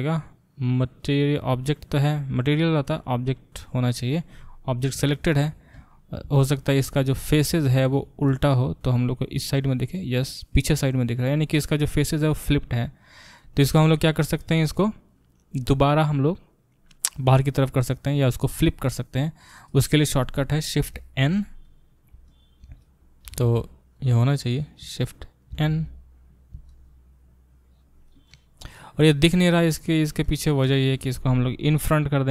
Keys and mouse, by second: 5.7 Tab, 20.8 shift+n, 23.3 g, 24.8-31.9 shift+middle drag, 25.5 shift+n, 31.9 click, 32.0-32.3 middle drag.